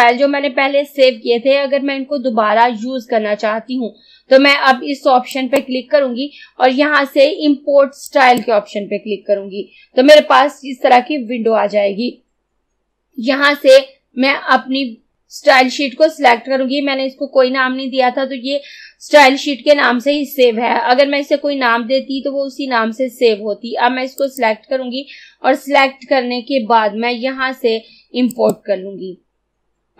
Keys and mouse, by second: 8.2 click, 24.2 click, 28.4 click.